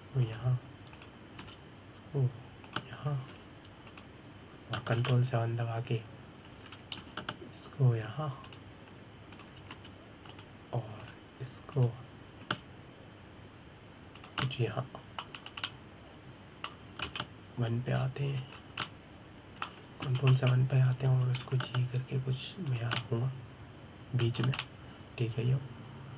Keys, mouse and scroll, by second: 0.8 g, 2.6 click, 3.1 g, 5.6 click, 6.6 ctrl+KP_7, 8.7 g, 11.0 click, 11.4 g, 12.7 click, 13.4 click, 14.1 g, 16.1-17.1 middle drag, 17.1 scroll down 2, 17.3-18.8 middle drag, 18.8 KP_1, 19.7-20.2 scroll up 2, 20.2 scroll down 2, 20.5-21.9 middle drag, 21.9 ctrl+KP_7, 23.1 g, 24.4 click, 24.7-26.1 middle drag, 26.1 scroll down 2.